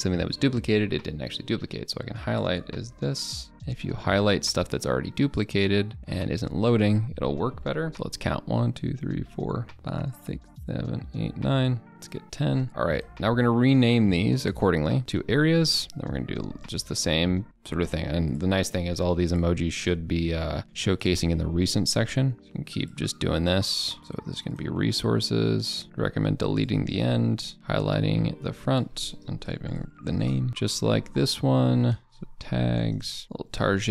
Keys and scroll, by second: 3.1 ctrl+d, 6.8 ctrl+d, 12.7 ctrl+d, 15.0 ctrl+BackSpace, 25.8 ctrl+z.